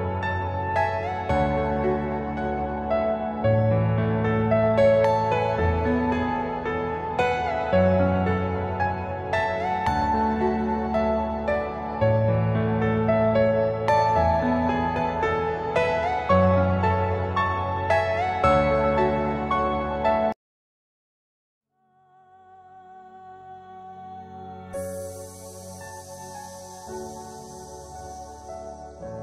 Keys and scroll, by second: 11.2 BackSpace, 18.9 F4, 22.8 F2, 28.5 F3.